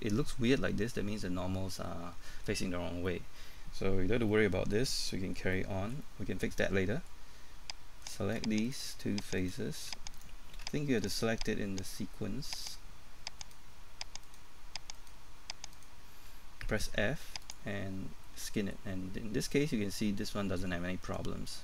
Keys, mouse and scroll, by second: 3.8-4.3 scroll down 1, 4.3 middle click, 6.0 middle click, 8.0 right click, 8.6 shift+right click, 9.4 shift+right click, 11.0 shift+right click, 12.6 shift+right click, 15.0 shift+right click, 17.4 click, 18.2 middle click.